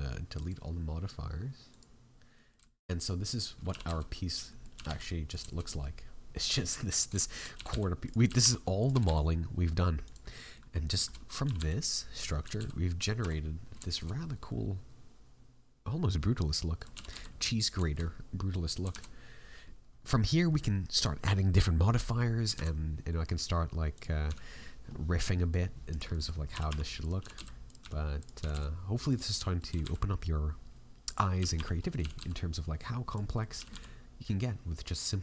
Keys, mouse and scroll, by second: 0.3 click, 2.3 middle click, 2.6 shift+middle click, 2.8-3.4 scroll up 3, 3.1 middle click, 3.4-4.2 scroll down 2, 3.6 g, 4.4 middle click, 4.7 g, 5.4 shift+middle click, 5.6 middle click, 6.0-6.4 scroll up 5, 6.4 middle click, 6.7 middle click, 7.1 shift+middle click, 7.5 g, 10.3 middle click, 10.7 scroll down 3, 10.9 shift+middle click, 11.4 r, 12.4 g, 13.2 a, 13.3 middle click, 13.8 shift+middle click, 14.2 scroll down 1, 14.4 middle click, 16.3-16.8 scroll down 2, 16.7 right click, 16.9 g, 17.8 shift+middle click, 18.0 middle click, 18.9 shift+a, 19.9 scroll up 2, 20.5-20.9 scroll up 2, 22.1-22.5 scroll down 5, 22.5 shift+a, 24.2 s, 26.1 middle click, 26.5 g, 27.7 s, 29.3 middle click, 29.6 g, 33.2 middle click, 33.5 g.